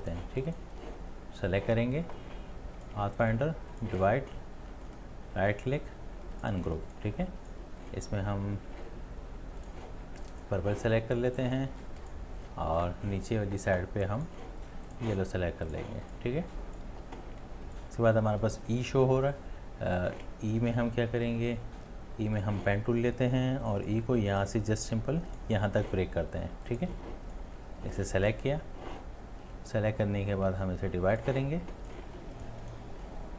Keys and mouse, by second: 4.9 space, 4.9 right click, 16.4 space, 16.9 space, 32.7 right click.